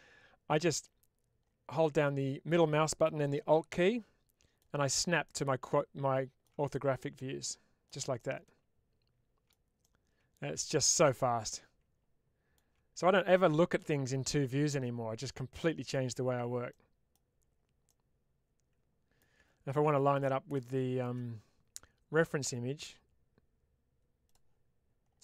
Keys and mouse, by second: 1.7-4.6 middle drag, 5.1-6.4 middle drag, 6.6-7.9 middle drag, 8.0-9.3 middle drag, 9.7-11.1 middle drag, 11.3-12.6 middle drag, 15.1 middle click, 16.6 middle click, 17.7-19.2 middle drag, 20.5 shift+middle click, 24.4-25.2 drag.